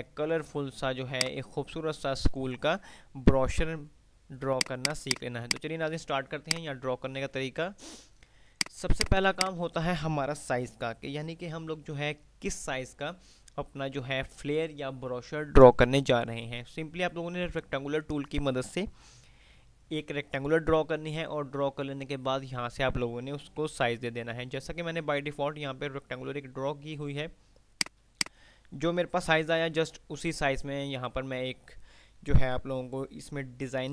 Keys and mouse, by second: 0.0 F2, 1.3 click, 1.5-2.5 F2, 4.3 click, 6.0 F2, 8.5 click, 30.2 F5, 30.2 typing.